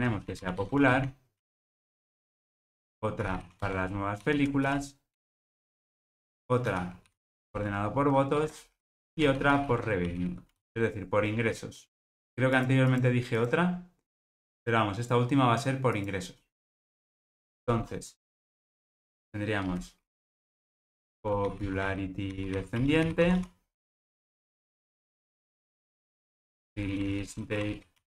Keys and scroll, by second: 17.4 shift+Return.